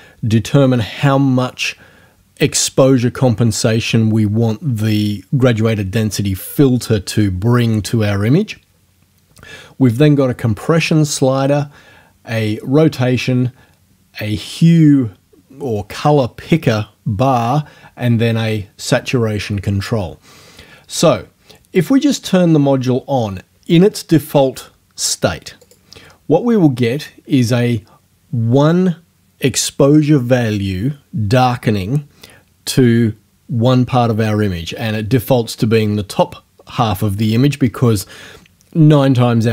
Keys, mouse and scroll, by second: 25.6 click.